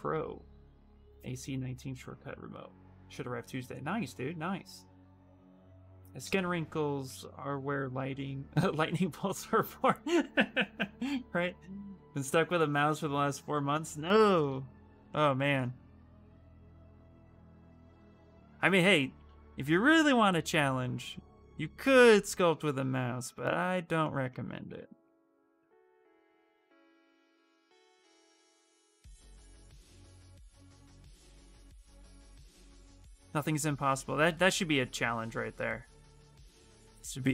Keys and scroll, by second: 17.7 s, 20.7 s, 26.3 ctrl+z, 29.1 space, 32.3 ctrl+z, 32.5 ctrl+z, 32.9 ctrl+z, 34.1 space.